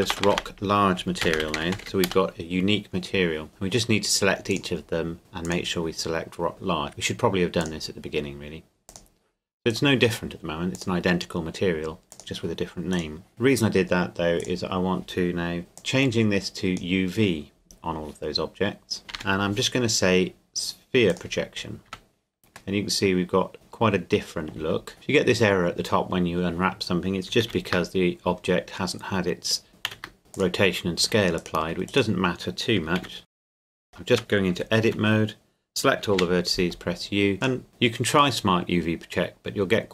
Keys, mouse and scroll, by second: 0.0 BackSpace, 1.2-1.8 typing, 2.1 Return, 3.5 right click, 4.5 click, 6.9 right click, 7.6 click, 9.7 right click, 10.7 click, 12.9 right click, 13.3 click, 14.4 right click, 15.8 click, 19.1 u, 21.1 click, 21.9 Tab, 22.7 middle click, 24.6 Tab, 24.9 middle click, 27.4 ctrl+a, 29.9 ctrl+a, 30.3 click, 31.0 Tab, 31.4 right click, 31.6 Tab, 31.9 right click, 33.0 ctrl+a, 33.2 click, 33.5 right click, 34.1 Tab, 34.5 a, 34.9 a, 36.1 u, 37.4 click, 37.7 Tab, 38.4 middle click.